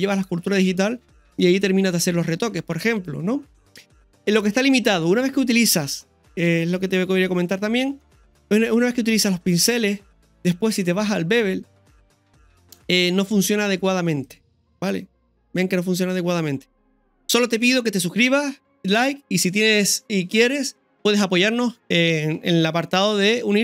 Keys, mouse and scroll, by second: 5.5-5.8 scroll down 2, 5.8 middle click, 6.7 scroll down 1, 6.8-7.6 scroll up 1, 7.6 scroll up 1, 8.0 middle click, 10.7-13.1 drag, 14.1-15.5 drag, 15.5 scroll down 1, 15.8 middle click, 16.9-17.4 scroll down 1.